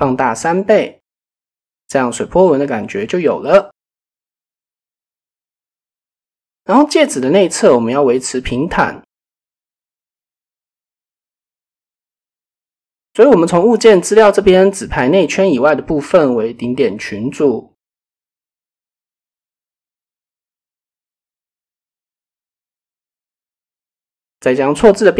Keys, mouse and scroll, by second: 2.0-3.1 middle drag, 3.6 KP_7, 5.0 middle click, 6.4 KP_1, 7.3 shift+middle click, 7.7 middle drag, 9.3 KP_1, 10.7 Tab, 11.9 shift+middle click, 13.9 shift+click, 15.1 click, 15.6 click, 16.3-17.5 drag, 19.0 click, 20.1 click, 24.0-25.1 drag.